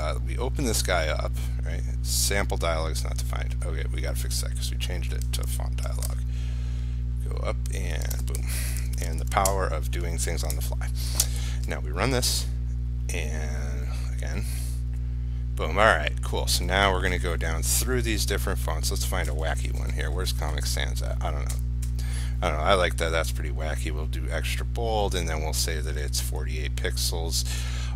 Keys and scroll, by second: 6.0 ctrl+c, 8.4 ctrl+v, 9.0 ctrl+s, 11.4 ctrl+r.